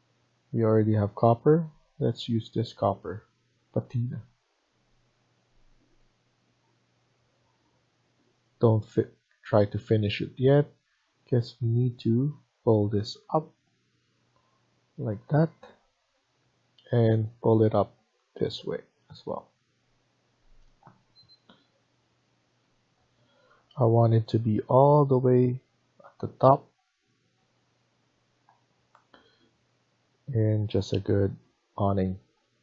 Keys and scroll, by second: 6.8 Escape, 19.7 Escape.